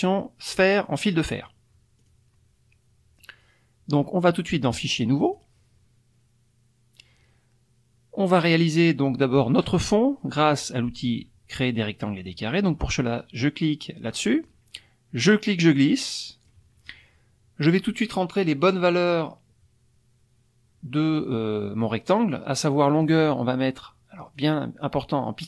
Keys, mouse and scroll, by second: 2.0 click, 4.7 click, 5.2 click, 14.1 click, 15.2-16.7 drag, 22.9 click, 24.3-25.4 drag.